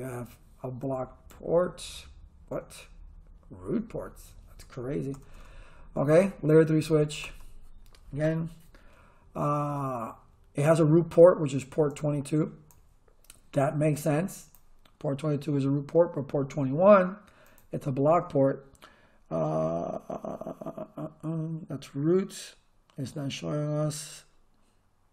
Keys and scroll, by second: 5.1 Return.